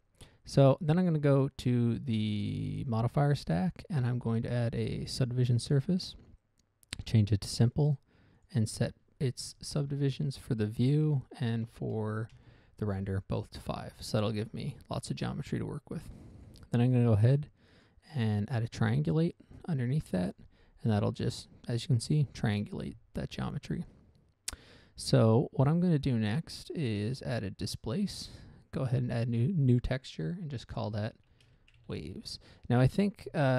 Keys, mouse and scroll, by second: 3.7 click, 5.5 click, 7.4 click, 8.1 click, 8.7 click, 9.1 click, 9.2 double click, 10.4 5, 11.4 Tab, 12.0 5, 12.7 Return, 14.7 z, 16.5 click, 16.8 click, 16.9 double click, 18.1 click, 19.2 click, 20.6 click, 21.3 z, 26.4 click, 28.1 click, 29.2 click, 29.7 click, 31.7-32.5 typing, 32.7 Return.